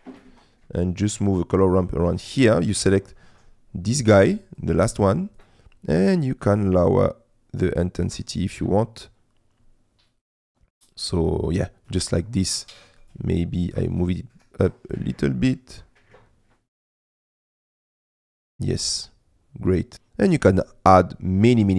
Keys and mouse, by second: 1.1 click, 4.6 click, 13.1 click, 13.7 click, 13.9 click, 19.9 space, 21.5 space.